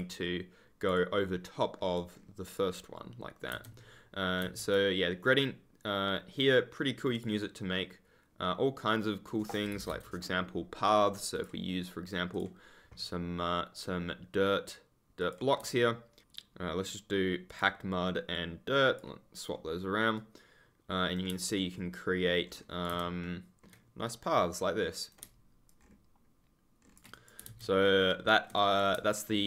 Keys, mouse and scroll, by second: 0.0-1.0 ctrl+scroll up 1, 1.1 ctrl+click, 1.9 ctrl+click, 2.0-2.6 ctrl+scroll down 1, 3.5 ctrl+z, 7.1 click, 9.7 u, 11.3 click, 15.1 click, 15.7 ctrl+middle click, 16.0 ctrl+scroll, 16.2 click, 17.4 click, 20.1 right click, 21.4 ctrl+click, 21.7 scroll up 1, 22.4-22.8 scroll down 1, 22.8 ctrl+z, 23.2 ctrl+middle click, 24.0 right click, 25.6 ctrl+click, 25.7-26.7 scroll up 1, 27.4 ctrl+z, 27.8 ctrl+click, 27.9-28.3 scroll up 1, 29.2-29.4 ctrl+scroll up 1.